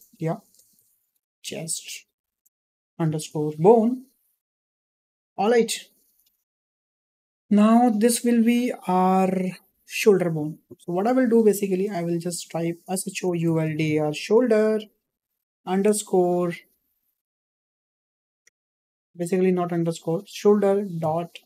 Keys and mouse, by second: 6.8-7.2 shift+middle drag, 8.7 click, 10.5-21.4 drag.